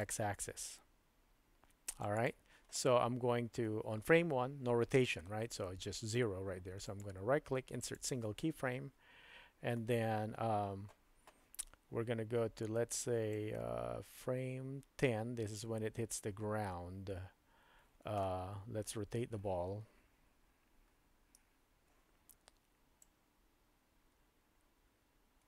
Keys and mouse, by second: 0.0-2.2 drag, 7.0 right click, 13.4-15.6 drag, 21.4 KP_Decimal, 23.0-25.4 drag.